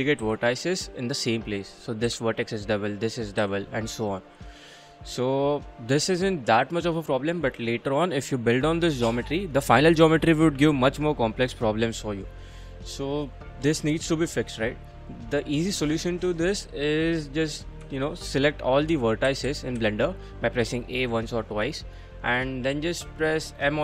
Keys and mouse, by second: 0.2 g, 1.1 click, 1.9 click, 2.1 g, 2.5 click, 3.2 click, 3.4 g, 4.7 click, 5.2 middle click, 12.2-13.3 middle drag, 13.4 middle click, 13.9 3, 15.4 middle click, 16.3 middle click, 17.8 3, 18.9 1, 19.3 a, 19.5 a, 19.8 a, 22.5 middle click, 22.7 middle click, 23.0 middle click, 23.1 middle click, 23.5 middle click.